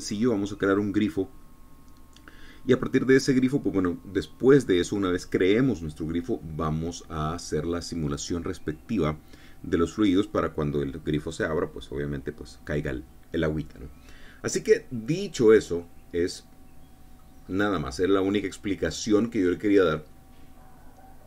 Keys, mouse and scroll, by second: 16.4-18.0 drag, 19.0-21.2 drag.